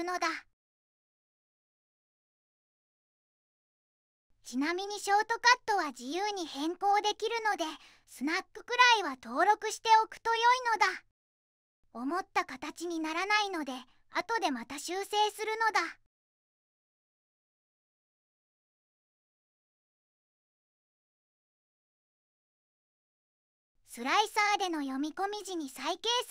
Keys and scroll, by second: 5.9 3, 8.6 4, 8.8 0, 8.8 Return, 9.2 Return, 10.6 2, 13.9 Left, 14.1 shift+Down, 14.6 Left, 14.7 Right, 15.1 1, 15.2 0, 15.3 Tab, 16.2 shift+Tab, 16.6 -, 16.8 1, 17.0 5, 17.0 Tab, 18.4 1, 18.5 Tab, 19.3 Tab, 19.6 -, 19.8 2, 20.0 Tab, 20.9 2, 21.0 Tab, 21.5 Tab, 21.8 -, 22.0 2, 22.1 Tab, 22.8 1, 23.0 Tab.